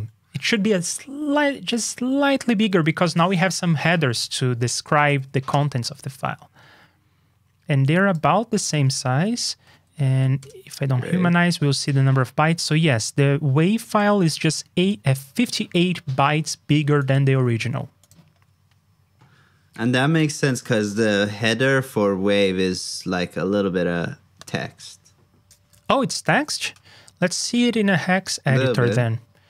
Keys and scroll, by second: 5.0 super+b, 26.2 super+b.